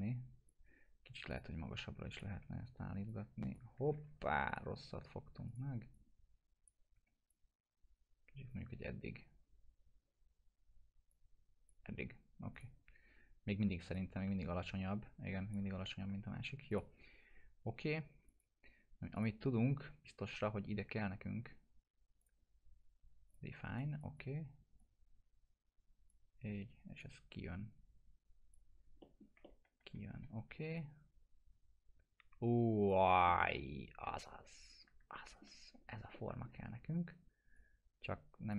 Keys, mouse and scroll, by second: 2.4 1, 3.1-3.7 click, 4.0 ctrl+z, 4.5 click, 6.9 w, 7.3-8.5 drag, 11.1-11.7 drag, 15.8 ctrl+z, 16.7 click, 22.2 click, 23.7 right click, 24.0-26.3 drag, 27.0-28.5 drag, 28.7 scroll down 1, 29.0 middle click, 29.4-30.0 alt+middle click, 30.2 e, 30.7-32.9 drag, 33.0 scroll down 1, 33.3-35.5 alt+middle drag, 35.7 scroll up 1, 36.1 alt+middle click, 36.7 scroll up 1, 37.5-38.5 click.